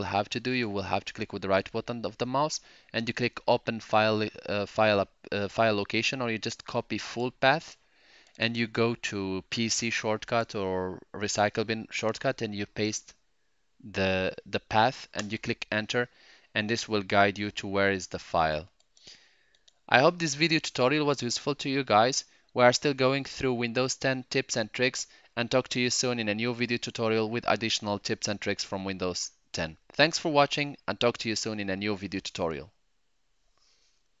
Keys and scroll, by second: 12.6 v, 15.1 Return.